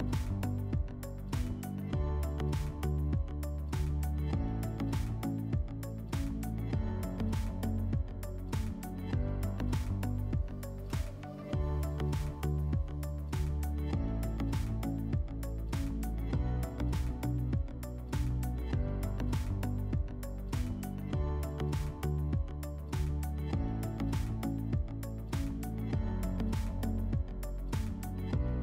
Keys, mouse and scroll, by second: 2.6 click, 8.2 click, 10.6 click, 13.1 F4, 18.6 click, 19.5-20.0 scroll, 22.8 click, 24.1 F4, 26.4 click, 27.6 click.